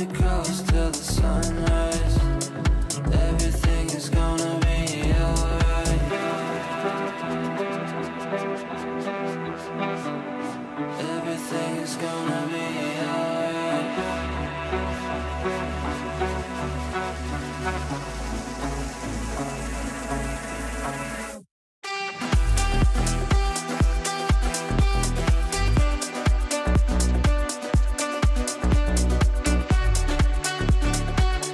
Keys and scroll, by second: 1.8 F3, 6.7 shift+F2, 6.9 F3, 15.9 shift+F2, 16.3 F3, 20.2 F3, 20.7 Escape.